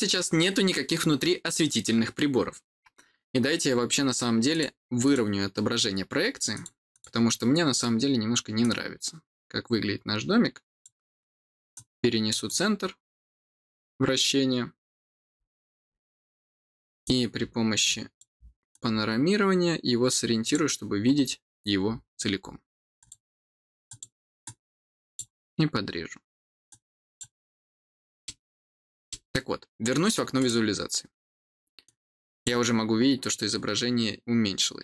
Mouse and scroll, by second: 4.4 click, 4.9 click, 6.4 click, 6.8 click, 8.5-10.7 drag, 11.6 click, 16.9-18.1 drag, 18.6-20.4 drag, 20.9 scroll down 2, 21.4-22.9 scroll down 2, 22.9 click, 23.8 click, 24.3 click, 26.6 click, 27.7 middle click, 27.7-28.1 scroll up 1, 28.6 middle click, 28.6 scroll up 1, 29.0 middle click, 29.2 scroll up 1, 30.3 click, 31.7 click.